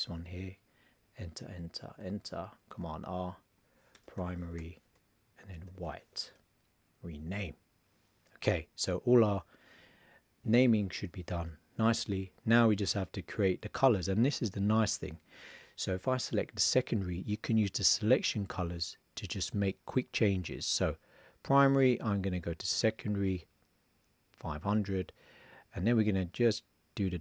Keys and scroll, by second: 2.8 super+r, 3.9 shift+p, 5.5 shift+w.